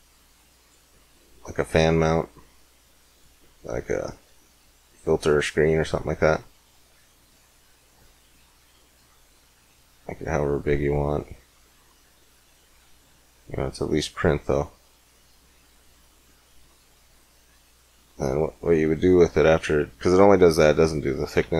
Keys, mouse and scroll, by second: 1.1-3.3 drag, 3.3-5.2 middle drag, 6.8-8.6 drag, 10.0-12.0 drag, 12.8 click, 13.4 click, 14.6 click, 14.7 middle click, 19.3 middle click, 21.3 Tab.